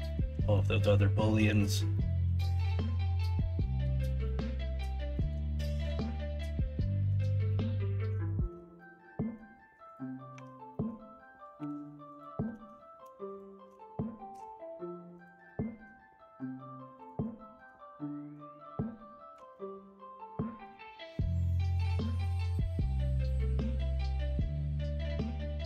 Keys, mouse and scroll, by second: 0.0 shift+middle click, 0.5 middle drag, 1.2 middle drag, 1.9 shift+middle drag, 4.2-5.1 middle drag, 5.5 shift+middle drag, 6.1-7.1 middle drag, 7.4-8.0 middle drag, 8.2 shift+middle drag, 8.8-9.3 middle drag, 10.3 Tab, 10.7 middle click, 11.5 3, 12.5 alt+z, 14.3 ,, 15.4 middle click, 17.4 shift+middle click, 19.4 alt+z, 20.3 scroll up 1, 20.6 scroll down 1, 20.9-21.2 scroll up 1, 21.2 scroll down 1, 21.6 scroll up 1.